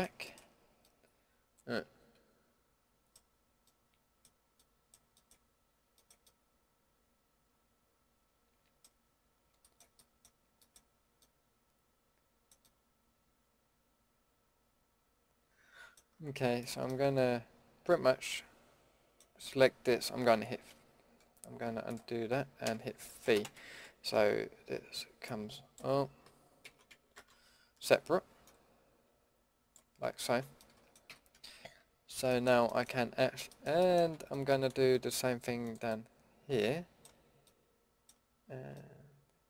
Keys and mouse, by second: 1.2-1.5 middle drag, 3.8 middle click, 4.1 middle click, 7.4 middle click, 8.1 middle click, 9.3-11.2 middle drag, 11.3-11.8 middle drag, 12.8 middle click, 13.0 middle click, 13.3 middle click, 13.7 middle click, 16.6-16.9 drag, 16.9 middle drag, 17.7 middle drag, 17.9 middle click, 18.0-18.4 middle drag, 22.6 v, 26.6 ctrl+z, 27.1 shift+Tab, 30.2 ctrl+z, 30.7 middle click, 31.1 a, 34.1 middle click, 34.6 middle drag, 35.6-37.7 middle drag, 38.7 middle drag.